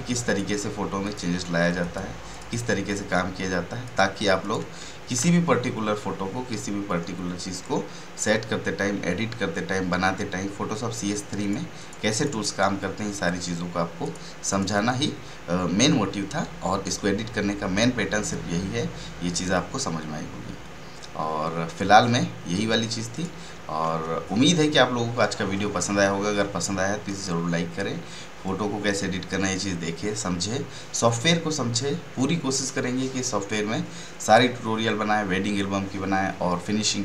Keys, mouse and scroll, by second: 1.4 click, 11.4 click, 23.1 click.